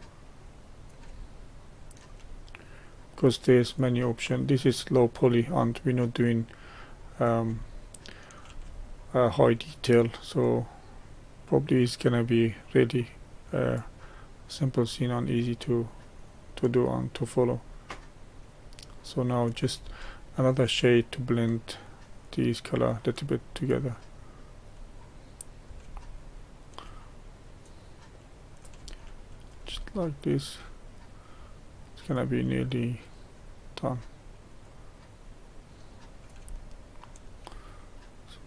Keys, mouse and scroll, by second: 1.3-2.6 shift+middle drag, 2.6-7.6 drag, 7.6-10.0 shift+middle drag, 10.0-20.0 drag, 20.0 shift+middle click, 20.9-26.0 drag, 26.0-27.3 shift+middle drag, 27.3-29.9 drag, 29.9 shift+middle click, 30.8-36.6 drag, 36.6-38.4 shift+middle drag.